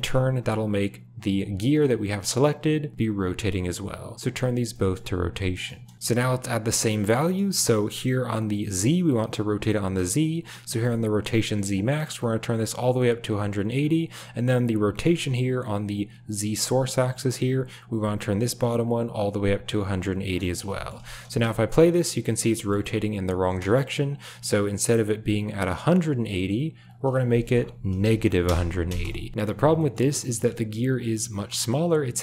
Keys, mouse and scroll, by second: 1.4 g, 3.1 drag, 4.8 shift+middle click, 5.4 shift+middle click, 11.7-13.2 drag, 18.9-20.1 drag, 20.8 shift+middle click, 21.2 space, 22.5 shift+middle click, 23.4 space, 25.8-28.5 drag, 28.8 space, 29.7 shift+middle click.